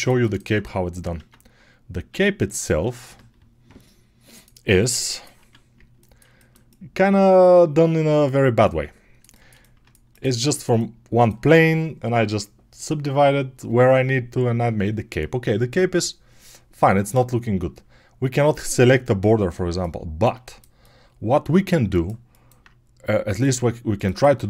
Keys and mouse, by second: 1.1 Tab, 2.0 Tab, 5.2 Tab.